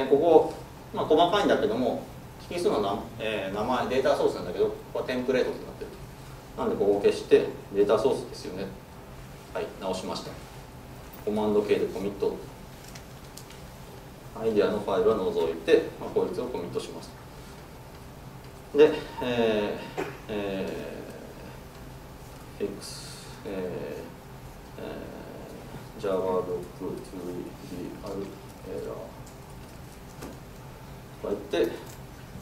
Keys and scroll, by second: 7.1 ctrl+space, 8.2 Tab, 9.9 super+s.